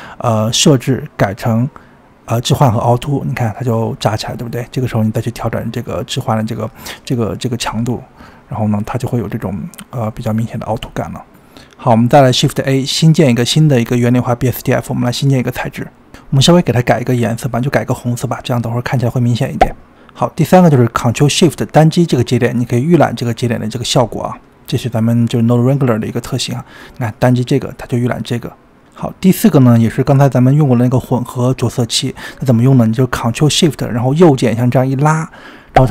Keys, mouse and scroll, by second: 1.6-3.9 drag, 3.9-5.8 scroll up 15, 5.8-11.1 drag, 11.1-11.8 scroll up 5, 11.8-12.5 middle drag, 12.5-12.9 scroll down 6, 12.9-13.4 middle drag, 13.4-14.2 scroll up 5, 14.2 scroll down 17, 14.5 click, 15.0 shift+a, 17.1 click, 17.8 click, 20.5 ctrl+shift+click, 26.4 ctrl+shift+click, 31.2 click, 32.6-35.9 ctrl+shift+right drag.